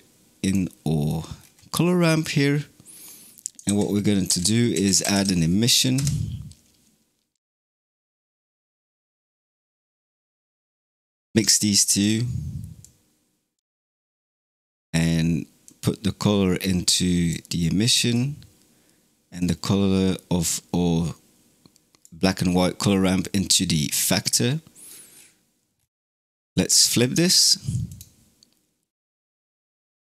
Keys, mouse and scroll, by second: 0.7-1.2 middle drag, 1.2-2.0 scroll up 5, 2.0 scroll up 3, 3.5 shift+a, 8.4-8.9 middle drag, 8.9 scroll down 2, 10.5-11.9 ctrl+shift+right drag, 11.9 click, 12.7 click, 13.9 scroll down 2, 14.4-15.5 middle drag, 15.5 click, 17.7-19.2 middle drag, 19.2 click, 23.7-24.3 scroll up 4, 24.3-25.0 middle drag, 25.0 scroll up 5, 25.6 scroll up 5, 26.0 middle click, 26.8-30.0 drag.